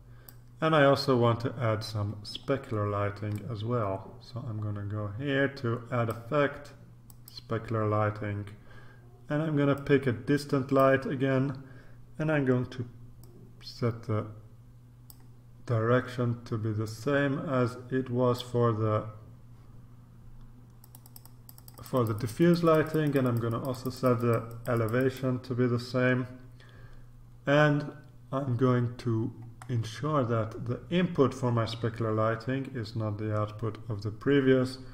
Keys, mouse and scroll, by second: 2.5-3.2 scroll down 2, 3.4-6.6 drag, 7.0 click, 9.7 click, 13.2-15.6 drag, 16.8-18.9 drag, 20.8 click, 25.7-29.6 scroll up 2, 29.6-30.4 scroll down 1.